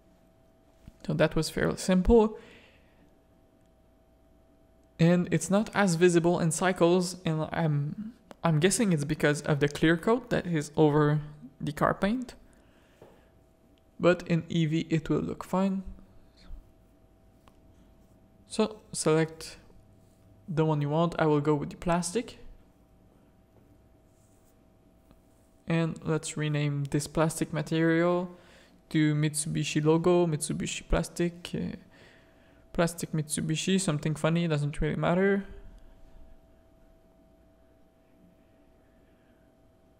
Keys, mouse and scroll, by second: 0.8 click, 1.6 alt+a, 2.1 click, 4.5 middle click, 8.2-9.2 middle drag, 9.4 shift+middle click, 12.3 middle click, 12.6 middle click, 15.8-16.3 middle drag, 17.0 middle click, 17.4 middle click, 19.3 middle click, 26.0 middle click, 27.7-33.9 drag, 34.0 click, 34.3 middle click, 35.4 click, 36.9 shift+click, 37.4 middle click.